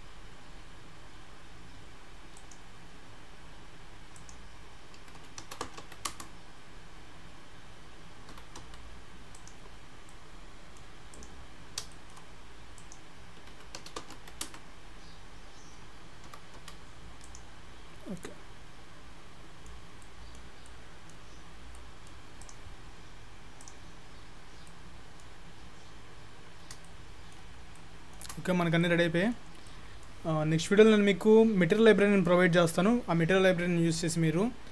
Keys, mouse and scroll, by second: 4.2 click, 5.2 KP_1, 8.3 g, 10.0 scroll up 1, 10.1 middle click, 11.2 click, 11.6 scroll down 3, 12.0 shift+middle click, 12.8 click, 13.6 KP_1, 16.3 g, 17.7-18.3 scroll up 2, 18.3 middle click, 18.3-18.7 scroll up 1, 20.1 middle click, 20.7 middle click, 21.8 middle click, 21.8-22.1 scroll up 1, 22.4 click, 22.9-23.6 scroll down 10, 23.6 click, 24.0-24.4 scroll up 5, 24.7 middle click, 25.5-26.3 scroll up 4, 26.9 shift+middle click, 28.3 shift+middle click, 28.4-28.8 scroll down 1, 28.8 middle click, 29.7 middle click.